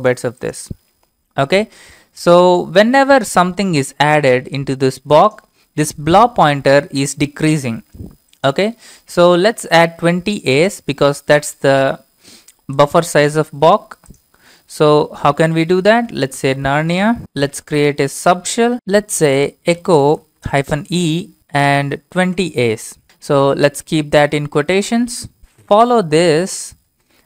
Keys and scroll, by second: 15.6-21.9 typing, 22.1 ctrl+v, 23.6 shift+', 24.0 Left, 24.5 Left, 24.6-25.3 Left, 24.8-25.4 typing, 25.4 Left, 25.4 Right, 26.8-27.2 typing.